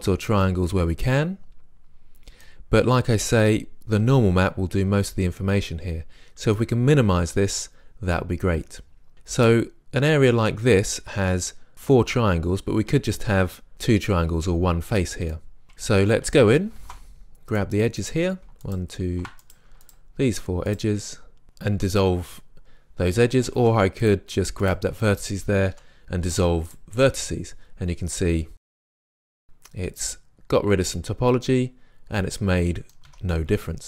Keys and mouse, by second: 7.6-9.4 middle drag, 9.4-11.2 drag, 11.3-15.4 middle drag, 15.4 drag, 16.8 ctrl+Tab, 20.0-21.4 drag, 23.6 ctrl+Tab, 24.7-25.8 drag, 25.8 Delete, 29.0 Tab, 30.2-30.8 middle drag, 33.1 Tab.